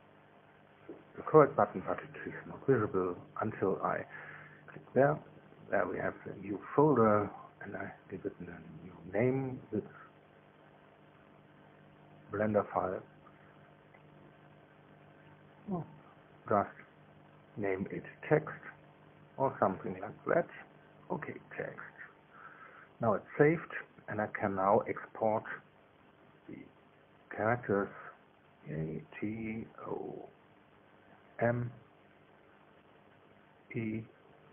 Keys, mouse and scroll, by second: 3.1 click, 4.8 click, 5.8 click, 7.9 F2, 8.8-10.7 right drag, 10.7 click, 10.8 right click, 11.9 click, 12.7 click, 20.4-21.6 typing, 22.0 Return, 22.6 Return, 25.1 click, 26.9 click, 27.8 click, 28.7 click, 29.8 right click, 30.9 click, 31.8 right click, 32.8 click, 34.0 right click.